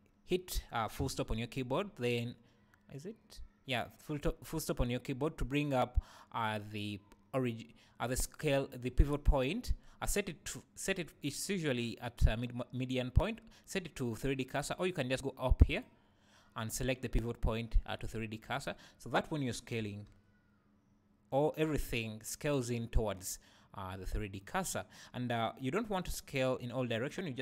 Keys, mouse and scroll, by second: 1.0 ., 15.7-24.6 drag, 19.9 s, 24.6 right click, 26.1 s, 27.1 right click.